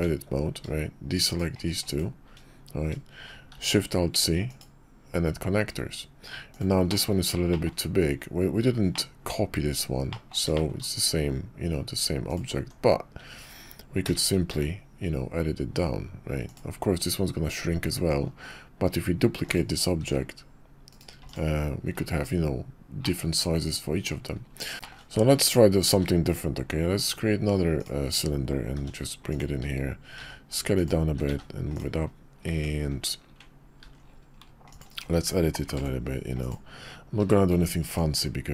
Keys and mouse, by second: 1.3 shift+click, 1.8 shift+click, 3.5 alt+shift+c, 6.9 middle drag, 7.5 shift+middle click, 9.0 middle click, 10.1 middle click, 10.5 shift+middle click, 12.3 drag, 12.5 Tab, 14.0 a, 14.5 s, 17.9 Tab, 19.4 click, 20.0 shift+d, 21.2 x, 23.0-24.1 drag, 24.8 shift+click, 25.9 shift+a, 28.7 g, 30.1 s, 31.1 s, 32.5 Tab, 33.8 ctrl+r, 35.8 ctrl+b, 37.2 q.